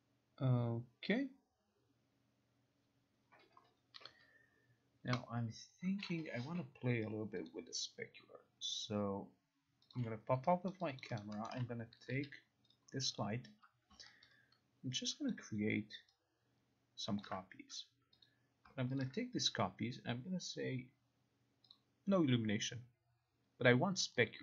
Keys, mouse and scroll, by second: 7.6 click, 10.0 click, 10.8 alt+right click, 11.1 alt+click, 11.5 alt+right click, 11.5 alt+middle click, 11.5 alt+right click, 12.3 e, 12.8 click, 13.3 click, 14.0 click, 15.4 ctrl+click, 15.9 ctrl+click, 17.3 ctrl+click, 18.3 click, 19.1 ctrl+click, 21.8 click, 24.1 click.